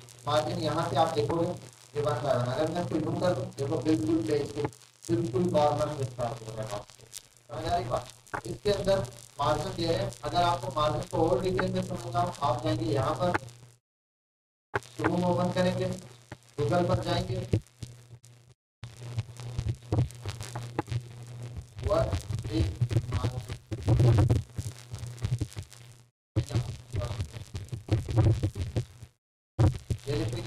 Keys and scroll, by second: 18.7 typing, 19.9 typing, 22.3-25.3 typing, 27.5-29.6 typing.